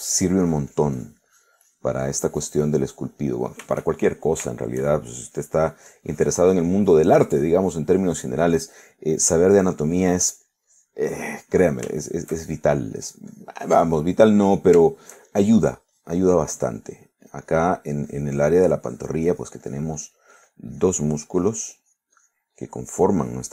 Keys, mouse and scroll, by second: 4.1 middle click, 5.0 shift+middle click, 6.3-9.5 shift+drag, 10.6-13.0 drag, 13.0 shift+middle click, 13.7-15.3 shift+drag, 15.3 middle click, 15.9 shift+middle click, 16.6 shift+click, 18.0-20.3 drag, 20.4-22.8 drag, 22.9-23.5 drag.